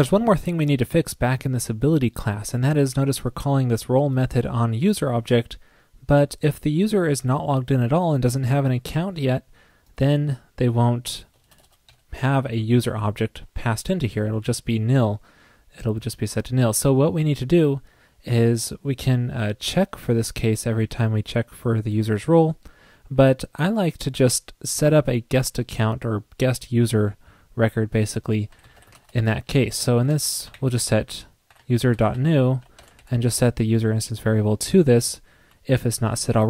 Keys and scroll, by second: 33.0 alt+Right.